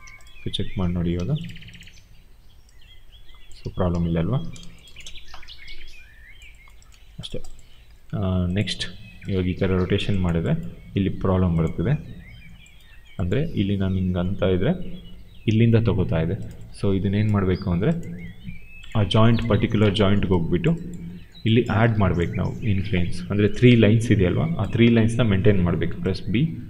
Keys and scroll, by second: 1.8 e, 3.5 ctrl+a, 4.7 0, 4.8 Return, 6.9 q, 8.6 e.